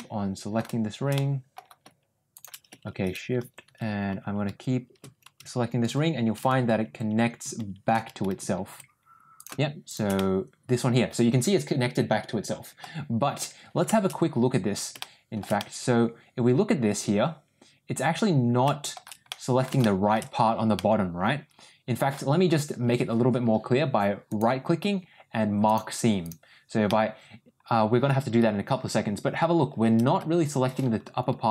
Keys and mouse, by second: 1.0 middle click, 2.2 shift+click, 10.1-12.7 middle drag, 14.9 shift+middle click, 15.5-18.9 middle drag, 19.2 middle click, 19.7 shift+middle click, 20.7-22.0 middle drag, 24.2-25.7 right drag, 26.1 click, 26.8-31.5 middle drag.